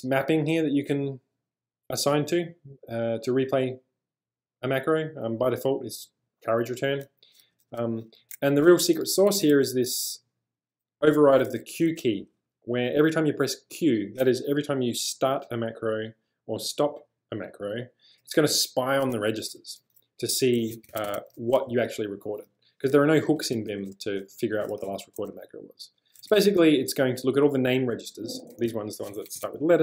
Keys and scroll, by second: 7.4 j, 7.6 j, 7.8 j, 9.0 b, 9.4 shift+v, 11.2 l, 11.4 l, 19.8 -, 20.7 Escape, 20.9 Escape, 21.1 Escape, 21.6-24.6 typing, 24.9 Return, 26.2 j, 28.5 shift+v, 29.2 Escape.